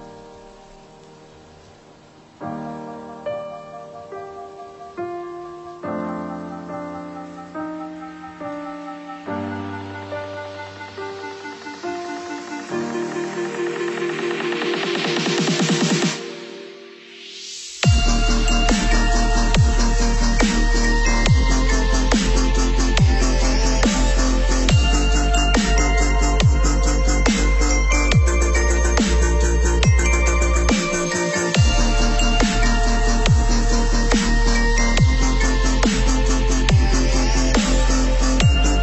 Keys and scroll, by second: 17.7 ctrl+[, 25.1 Delete.